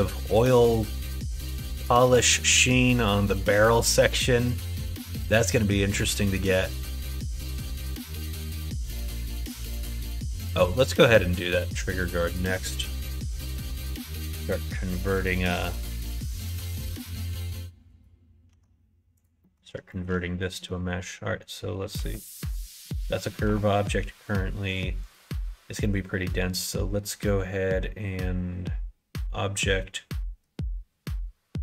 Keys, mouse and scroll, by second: 14.6 click, 15.3 right click, 15.9 middle click, 16.7 click, 17.9 right click, 18.5 Tab, 19.4 middle click, 19.9 middle click, 20.5 middle click, 21.9 Tab, 22.5 middle click, 23.0 middle click, 23.4 Tab, 25.0-31.6 drag.